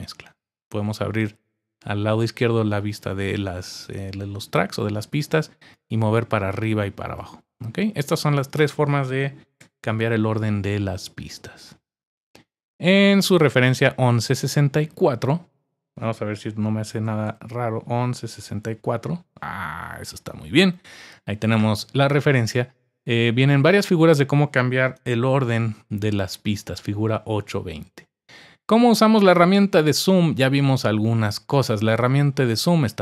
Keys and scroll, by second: 9.6 super+=, 17.0-18.6 typing.